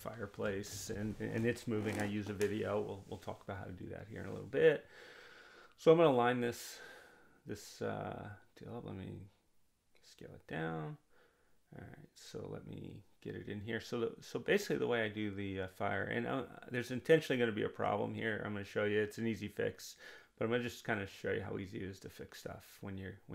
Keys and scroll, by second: 5.1-6.0 typing, 8.1 2, 8.4 0, 8.5 Return, 22.7 1, 23.1 0.